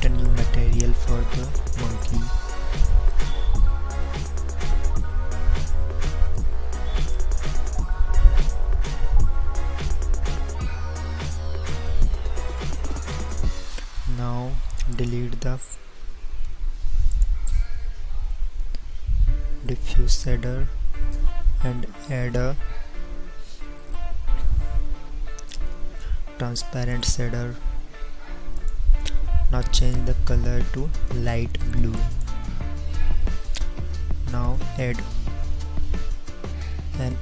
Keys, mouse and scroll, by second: 0.9 n.